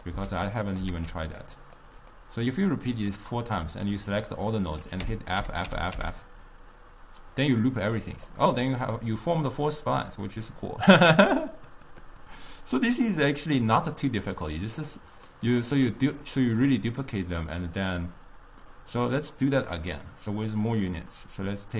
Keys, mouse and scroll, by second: 0.3 shift+d, 1.0 shift+d, 2.2-3.3 middle drag, 3.3-4.3 drag, 4.3-5.1 middle drag, 5.1 f, 5.5 f, 5.7 f, 6.0 f, 7.7-8.4 middle drag, 8.4 click, 8.8-12.0 middle drag, 13.5 click, 14.7-15.7 drag, 16.3 click, 18.8-20.6 middle drag, 20.6-21.7 drag.